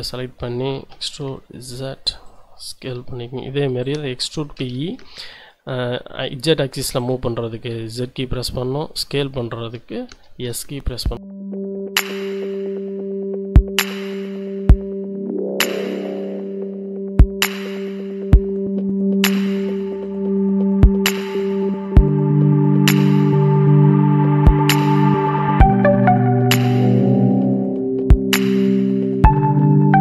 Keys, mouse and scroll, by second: 0.9 e, 1.2 z, 2.2 click, 2.9 s, 3.8 click, 4.6 e, 5.2 z, 7.0 click, 7.7 s, 9.1-10.1 drag, 10.1 e, 10.5 z, 11.6 click, 12.2 s, 13.4 click, 14.3 e, 14.7 z, 16.2 click, 16.7 s, 18.7 click, 19.6 e, 19.9 z, 22.5 click, 23.2 s, 25.2 click, 25.7 shift+click, 26.1 shift+a, 27.4 alt+shift+click, 28.5 s.